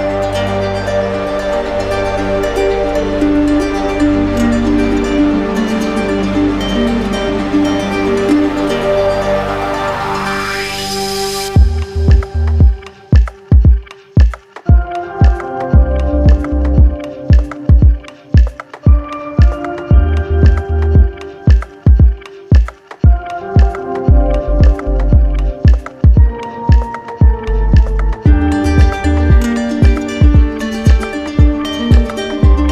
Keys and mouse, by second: 0.5-1.8 alt+drag, 4.5-5.6 drag, 7.0-8.0 drag, 9.6-10.7 drag, 15.3-16.4 drag, 17.1-18.2 drag, 19.8-21.0 drag, 21.6-22.8 drag, 24.1-25.2 drag, 25.3-28.3 drag, 28.4-30.7 right drag.